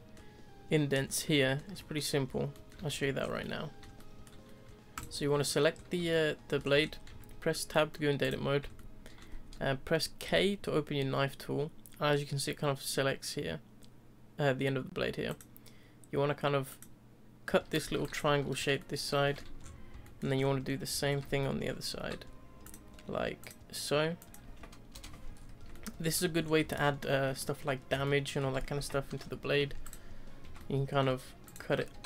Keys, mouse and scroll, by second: 1.0-1.4 scroll down 2, 1.4 shift+middle click, 2.1-2.5 scroll down 2, 2.5-3.2 middle drag, 3.2 scroll up 4, 3.4-4.3 middle drag, 4.3-4.9 scroll down 2, 4.9 click, 5.3-5.8 scroll down 2, 5.8-6.1 scroll up 1, 6.1-6.8 shift+middle drag, 6.8 scroll up 2, 7.1 Tab, 7.5-8.2 middle drag, 8.2 click, 8.8-10.2 shift+middle drag, 10.2 k, 18.8-19.6 middle drag, 19.6-20.0 scroll up 4, 20.0-20.3 shift+middle drag, 20.3-20.9 scroll up 6, 20.9 scroll down 1, 20.9-21.4 scroll up 5, 21.4-21.9 middle drag, 21.9 k, 25.3 scroll down 1, 25.5 3, 25.7-26.0 middle drag, 26.0-26.7 scroll down 5, 26.7-29.1 shift+middle drag, 29.1 Delete, 30.4 1, 30.5-31.4 middle drag, 31.4 click, 31.9 g.